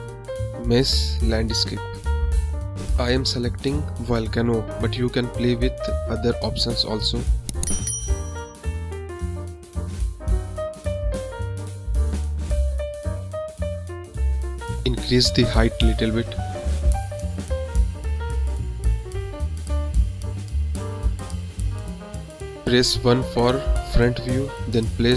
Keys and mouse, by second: 0.5 click, 2.0-2.5 middle drag, 3.7-4.8 drag, 5.3-5.8 drag, 6.5-7.5 drag, 8.5-9.3 drag, 10.2-11.2 drag, 11.6 middle click, 12.0 drag, 12.2 middle click, 14.8-15.3 drag, 17.7 click, 18.6 click, 19.6 click, 20.9 click, 21.1 middle click, 22.8 KP_1, 23.7 g.